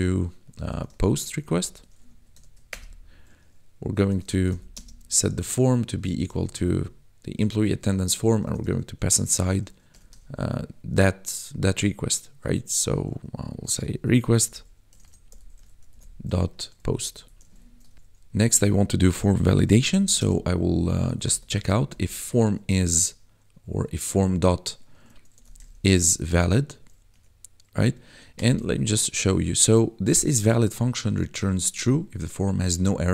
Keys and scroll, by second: 1.2-2.4 typing, 2.0 Right, 2.7 Return, 4.1-4.7 typing, 6.1 shift+e, 6.2 m, 6.4 p, 7.3 Tab, 7.9-10.2 typing, 13.7-17.3 typing, 17.9 ctrl+s, 19.8-21.8 typing, 25.3 i, 25.4 s, 25.7 shift+-, 26.1 v, 27.1 Tab, 28.3 BackSpace, 28.4 d.